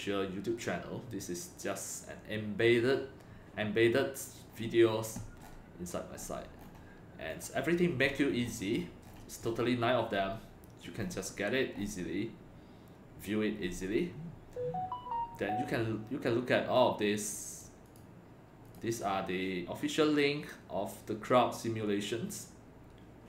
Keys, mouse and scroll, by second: 4.4 scroll down 2, 5.4 scroll down 1, 6.2-6.8 scroll up 2, 7.3 click, 8.0 scroll up 2, 8.4-8.8 scroll down 2, 8.8 scroll up 1, 9.0 scroll down 1, 11.9-12.9 scroll up 2, 13.7 scroll down 1, 16.7 click, 17.8 click, 18.6 click.